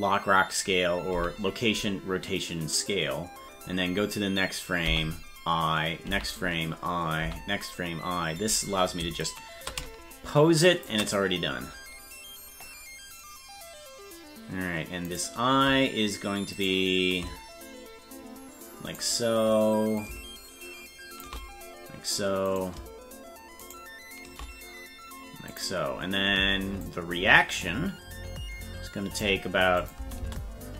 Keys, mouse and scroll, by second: 9.2-10.9 shift+drag, 15.4-19.0 right drag, 20.0-21.5 drag, 22.6 right click, 23.9 shift+right click, 25.5 click, 26.8-29.2 drag, 29.8 click, 30.0 space.